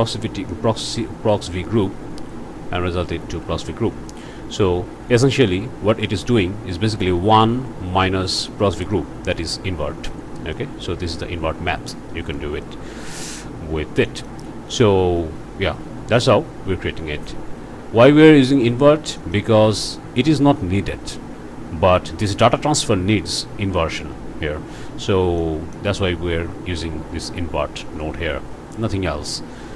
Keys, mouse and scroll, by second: 1.4 ctrl+v, 3.2 ctrl+v, 10.5-12.6 middle drag, 12.7 scroll down 1, 13.1 middle click, 13.7 scroll up 1, 14.1 middle click, 19.3 middle click, 19.9 click, 25.1 scroll down 1, 25.4 click, 27.9-29.0 drag, 29.5 scroll down 1.